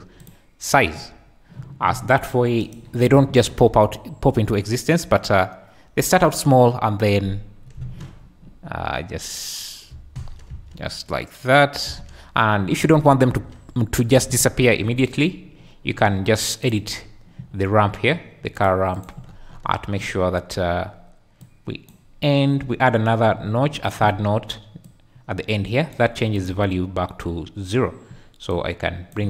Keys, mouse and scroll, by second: 0.2 click, 2.7 shift+drag, 3.1 space, 7.8 space, 10.0 space, 10.1 Escape, 10.5 space, 11.8 space, 13.3 space, 14.1 space, 16.7 click, 18.6 click, 19.0 click, 21.4 click, 23.8 click, 24.8-25.9 drag, 26.4 click.